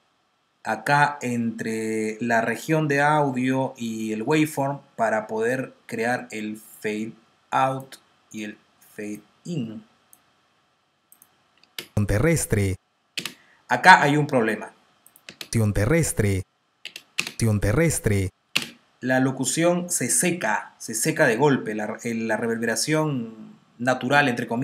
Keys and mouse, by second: 6.6 click, 11.8 space, 13.3 space, 15.0 click, 15.2 space, 16.7-19.0 typing.